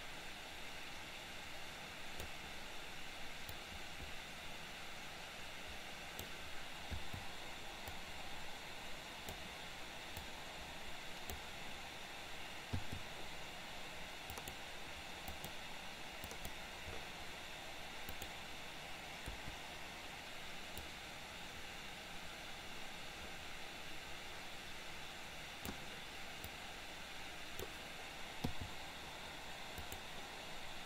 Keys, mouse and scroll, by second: 3.6-6.2 drag, 7.1 i, 8.1-9.5 drag, 10.3-11.3 drag, 14.3 click, 15.3 click, 16.3 click, 18.1 click, 19.3 Delete, 21.0-25.8 drag, 26.7-27.7 drag, 30.0 click.